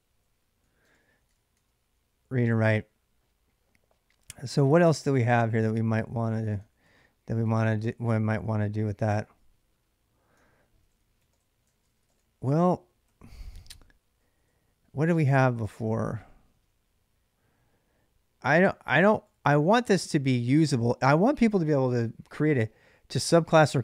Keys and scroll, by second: 0.0-1.5 typing, 4.7 k, 5.9-7.1 typing, 7.3 ctrl+[, 7.3 ctrl+j, 10.1-14.5 typing, 15.5 ctrl+a, 15.6 ctrl+a, 19.1 ctrl+a.